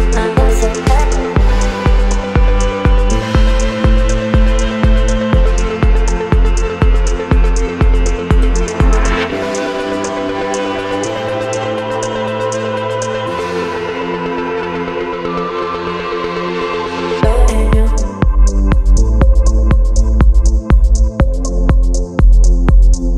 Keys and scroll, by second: 2.6 Up, 2.8 Up, 2.9 Up, 3.0 Up, 8.1 Up, 8.2 Up, 8.4 Up, 8.5 Up, 8.7 Up, 9.8 Up, 9.9 Up, 10.0 Up.